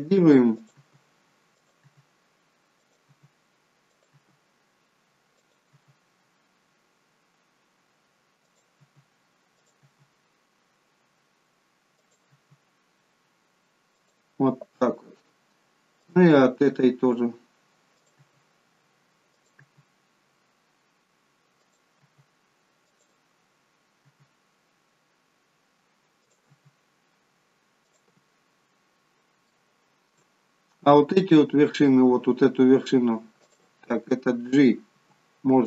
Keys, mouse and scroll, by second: 0.7 e, 1.8 e, 3.0 e, 4.1 e, 5.7 e, 8.8 e, 9.8 e, 12.3 e, 16.0 click, 16.6 e, 18.1 e, 19.6 e, 22.0 e, 24.1 e, 26.5 e, 29.5 shift+middle click, 30.3-30.9 scroll up 4, 33.4 click, 34.9 g.